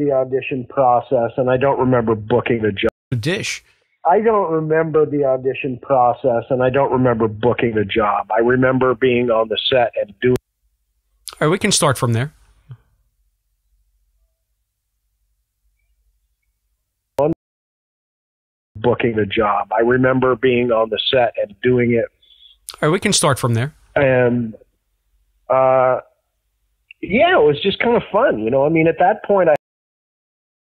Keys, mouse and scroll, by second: 0.7-1.8 drag, 2.2 click, 2.8 space, 3.0 click, 3.0 space, 4.7 ctrl+s, 5.5 space, 17.2 space, 17.5 click, 18.5 click, 18.7 space, 19.7 click, 20.7-28.9 drag, 28.9 space, 29.5 space, 29.6-30.7 drag.